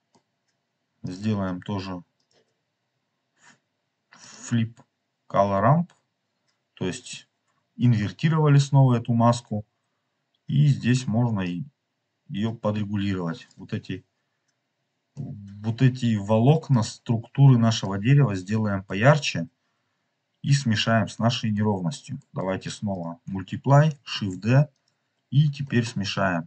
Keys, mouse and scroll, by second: 0.9-2.3 drag, 4.1-6.7 drag, 11.3-13.5 drag, 14.0 click, 14.0 scroll up 1, 15.0-16.7 middle drag, 15.0 scroll up 1, 17.2 scroll down 2, 17.7-18.9 middle drag, 19.0 scroll down 1, 19.9 scroll up 2, 20.4-21.3 scroll down 4, 21.4 middle click, 21.7 middle click, 22.1 middle click, 22.8 click, 24.2 shift+d, 24.7 click, 25.6 middle click.